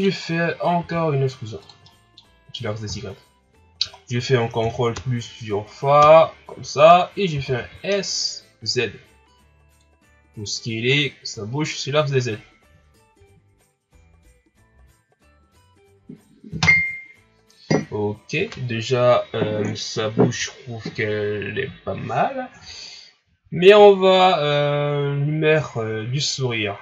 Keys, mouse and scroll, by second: 0.7 e, 1.8-2.8 middle drag, 2.8 KP_1, 3.6-4.1 scroll down 6, 4.6 ctrl+KP_Add, 4.9 ctrl+KP_Add, 6.0 ctrl+KP_Add, 7.3 s, 11.3 scroll up 2, 24.4 scroll down 1, 24.8 scroll up 2.